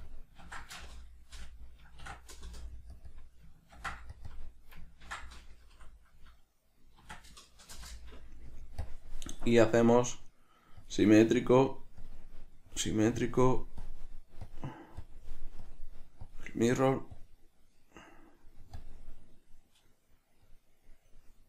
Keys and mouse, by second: 0.3-3.3 drag, 2.8 Return, 3.4-4.5 drag, 4.6-9.1 drag, 8.1 Return, 10.1-11.8 drag, 12.3-13.6 drag, 14.1-15.4 drag, 15.9-19.1 drag, 20.7-21.4 drag.